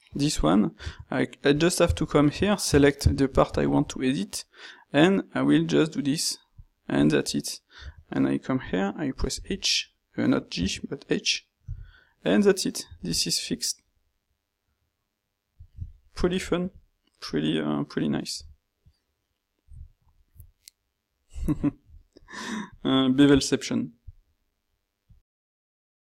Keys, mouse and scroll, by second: 1.9 ctrl+shift+q, 9.4 g, 11.8 h.